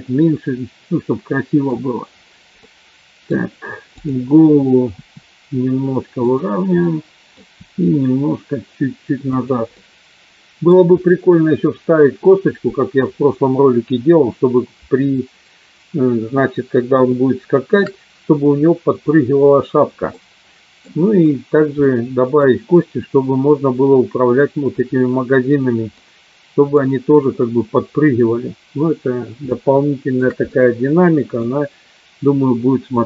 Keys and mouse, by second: 0.0-1.9 middle drag, 2.6 middle click, 4.0 click, 5.1 r, 6.5 click, 6.7 middle click, 7.5 r, 9.8 middle click, 17.1 shift+middle click, 20.1 middle click, 21.9 middle click, 26.0 middle click, 29.6 shift+middle click, 30.5 middle click.